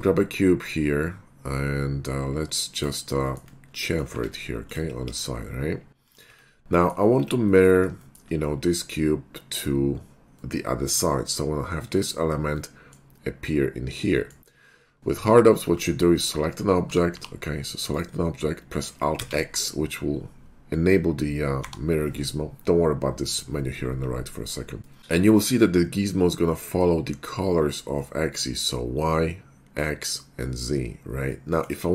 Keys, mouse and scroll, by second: 2.8 click, 3.3 shift+middle click, 4.1 Tab, 4.6 click, 5.0 ctrl+b, 6.1 click, 6.3 Tab, 7.2 scroll up 1, 7.6 middle click, 7.8 middle click, 8.0 shift+middle click, 10.4-11.3 middle drag, 12.6-13.0 middle drag, 14.2 middle click, 16.2 click, 16.9 f, 17.2 g, 18.0 right click, 18.3 scroll down 1, 19.2 alt+x, 21.6 h, 24.8 shift+middle drag, 25.0 KP_9, 31.5 middle click.